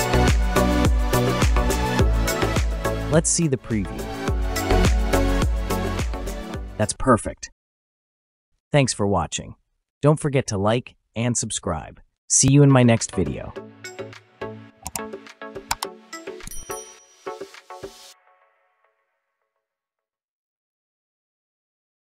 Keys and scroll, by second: 0.0 typing, 1.9 typing, 2.9 Return.